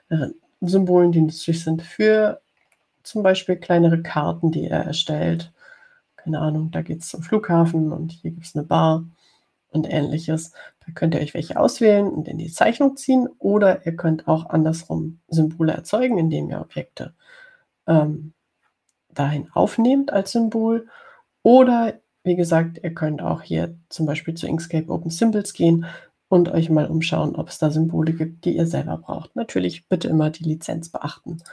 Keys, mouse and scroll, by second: 3.5-4.3 scroll up 4.